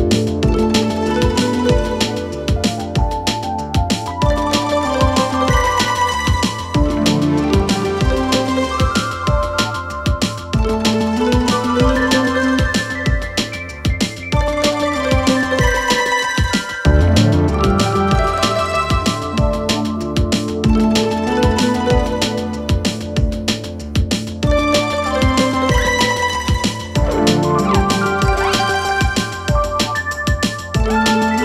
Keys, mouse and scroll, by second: 0.4-1.1 scroll down 2, 1.1 click, 1.6 g, 1.8 x, 3.4 click, 3.8 g, 4.2 x, 5.4 g, 6.6 click, 6.7-7.2 drag, 7.6 Tab, 8.2-10.2 right drag, 10.2 ctrl+z, 11.3 click, 11.6 click, 11.7 click, 12.1 click, 13.1 Tab, 13.4 scroll down 2, 13.9 click, 15.6 shift+a, 19.4-19.9 scroll up 2, 19.9 g, 21.9 s, 24.6-25.2 scroll down 3, 25.2 click, 25.8 click, 26.3 click, 26.8 s, 27.5 s, 28.5 click, 29.7 click, 30.7 click, 31.0 click.